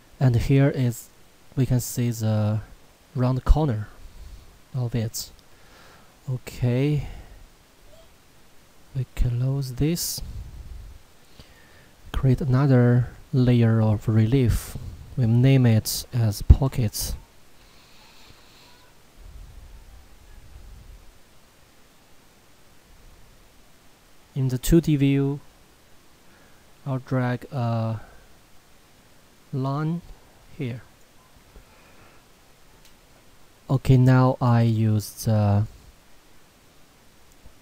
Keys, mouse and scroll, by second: 0.5 shift+middle click, 1.5 scroll up 1, 1.7 middle click, 3.9-4.4 scroll up 1, 4.4 middle click, 5.0 scroll down 1, 5.9 shift+middle click, 6.2 scroll down 1, 6.9 middle click, 7.0 scroll down 1, 9.1 click, 15.9-17.6 typing, 21.7 middle click, 22.5 scroll down 1, 23.1 middle click, 24.4 click, 34.9 click.